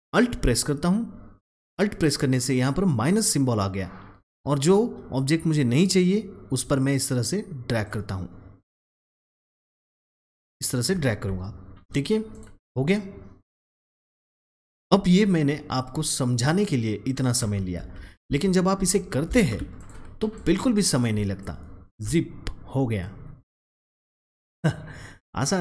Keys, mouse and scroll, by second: 4.1-9.6 alt+drag, 9.7-11.9 alt+drag, 17.7 double click, 17.9 ctrl+z, 19.3 ctrl+shift+z, 19.7 click, 21.3-25.6 alt+drag.